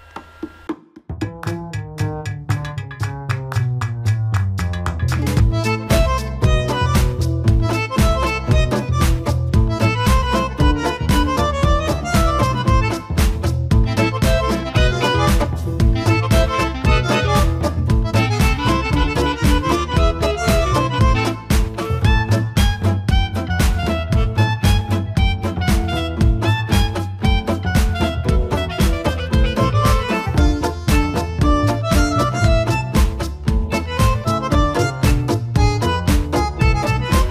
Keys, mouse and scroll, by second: 2.1 click, 3.5 f, 3.8 f, 4.3 click, 5.0 click, 5.5-6.0 scroll up 1, 6.0 click, 6.7 click, 7.3 click, 7.8 scroll down 2, 8.0 middle click, 8.4 middle click, 8.6-9.3 scroll up 4, 9.3 click, 9.7-10.4 scroll down 3, 9.9 middle click, 10.4-10.8 scroll up 1, 10.8 click, 11.3 scroll down 1, 11.4 scroll up 3, 11.6 middle click, 12.3 scroll up 1, 12.4 middle click, 12.8 middle click, 13.4-13.8 scroll up 1, 13.8 click, 14.1 click, 14.3 click, 14.6 click, 14.9 click, 15.1 click, 15.7 scroll down 1, 15.9 middle click, 16.1 scroll up 2, 16.4 click, 16.6 middle click, 16.9 scroll up 1, 17.0 scroll down 1, 17.2 middle click, 17.8 click, 18.7 click, 19.3 middle click, 19.6 middle click, 19.8 scroll up 1, 20.3 ctrl+z, 20.9 click, 21.9 click, 22.9 click, 23.7-24.0 scroll down 4, 24.0 middle click, 24.2 scroll up 2, 24.4 middle click, 24.5 scroll down 1, 24.7 middle click, 25.0 scroll up 1, 25.3 middle click, 26.2 click, 26.6 scroll down 4, 26.8 middle click, 27.1 scroll up 3, 27.2 middle click, 28.0 middle click, 29.9-30.4 scroll down 4, 30.4 KP_1, 31.0-32.0 middle drag, 32.1-32.5 scroll up 4, 32.5 middle click, 33.1 scroll up 1, 33.3 middle click, 34.8 click, 36.4 f, 36.7 f, 37.2-37.3 drag.